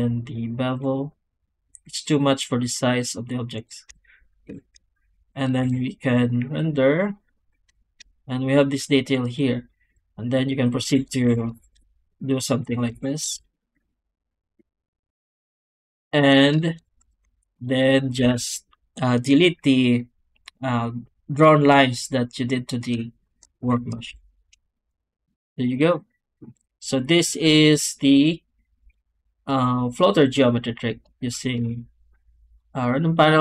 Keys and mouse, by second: 5.5 z, 8.7 middle click, 10.4 click, 10.8 Tab, 11.1 a, 11.5 shift+d, 12.0 click, 12.5 click, 12.8 shift+r, 13.3 Tab, 13.8 alt+a, 15.7 click, 16.1 Tab, 16.9 2, 17.3 alt+a, 17.5 alt+shift+click, 23.5 ctrl+x, 24.0 Tab, 26.4 click, 31.5 shift+q.